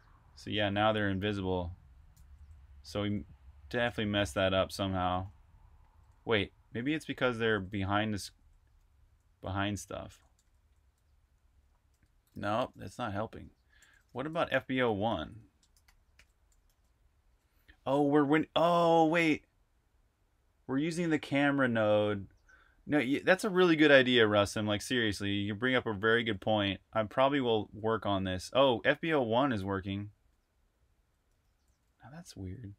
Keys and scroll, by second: 0.0-4.3 typing, 5.4-17.7 typing, 12.0 super+q, 25.6-32.7 typing.